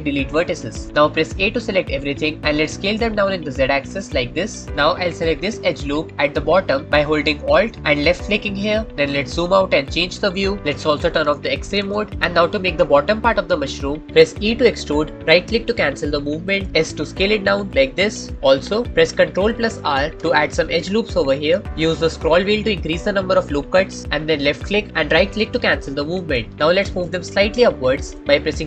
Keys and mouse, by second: 2.0 a, 2.7 s, 4.5 click, 4.5 z, 8.4 alt+click, 9.6 middle click, 11.6 alt+z, 12.1-14.0 middle drag, 14.4 e, 16.3-18.3 drag, 16.8 s, 18.3-19.3 shift+middle drag, 19.4-21.0 shift+middle drag, 20.5 ctrl+r, 26.9-28.0 drag, 28.4 g.